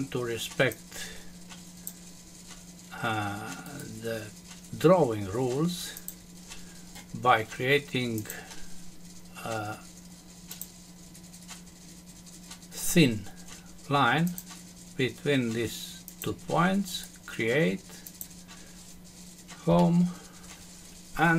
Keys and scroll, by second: 19.7 Home.